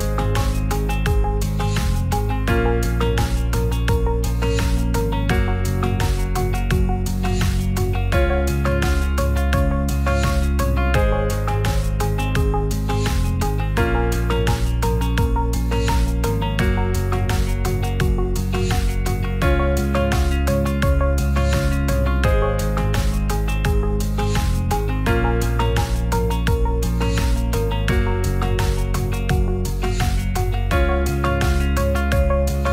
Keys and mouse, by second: 0.3 click, 9.4 Tab, 18.1 click, 21.5-23.4 shift+drag, 24.3 s, 27.0 r, 29.4 click, 30.9 click.